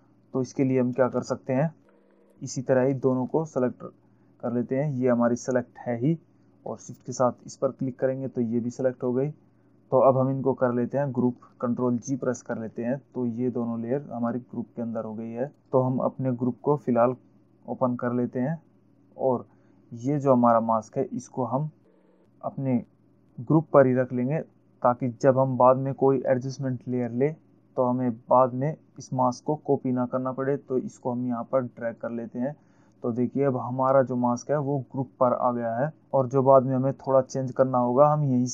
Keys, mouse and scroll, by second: 1.4 ctrl+alt+z, 7.9 shift+click, 12.7 ctrl+g, 15.6 click, 31.4 click.